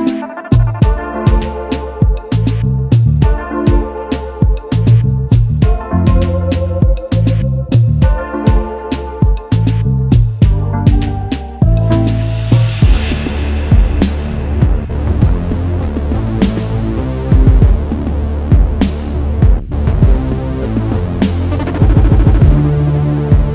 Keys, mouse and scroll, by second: 2.6-3.0 alt+scroll down 1, 3.2 space, 3.3 double click, 3.8 alt+scroll down 1, 4.2 alt+scroll up 1, 4.8 space, 5.3 space, 7.1 double click, 9.3-9.9 alt+scroll up 1, 10.9 ctrl+shift+], 11.9 alt+shift+click, 13.8-14.5 typing, 16.8 alt+scroll down 1, 17.8-18.2 alt+scroll up 1, 19.6 alt+scroll down 1, 21.7-22.2 alt+scroll down 1, 22.2 alt+scroll up 1, 22.3-22.8 alt+scroll down 1, 22.8-23.3 alt+scroll up 1, 23.3 alt+scroll down 1.